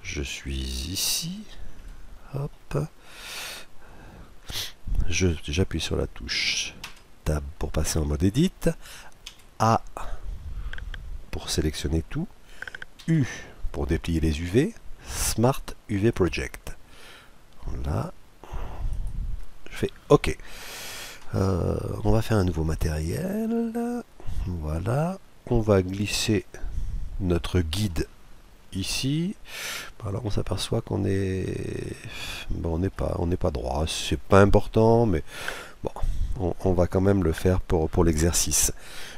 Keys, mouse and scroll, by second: 1.8 KP_Decimal, 2.6-4.2 middle drag, 4.2-5.3 scroll down 1, 6.8 Tab, 9.3 a, 13.0 u, 22.8-24.4 drag, 26.4-27.7 drag, 28.9 middle click, 30.0-31.6 middle drag, 31.6-32.3 scroll down 1, 32.3-34.3 middle drag.